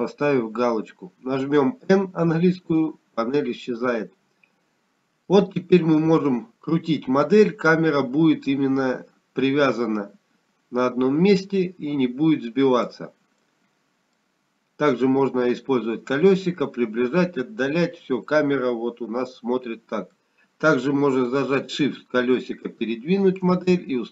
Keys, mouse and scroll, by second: 2.1 click, 4.8 n, 8.7 middle click, 17.5 middle click, 17.5-18.0 scroll down 2, 19.3-20.0 scroll down 2, 21.1 middle click, 21.1-21.7 scroll down 11.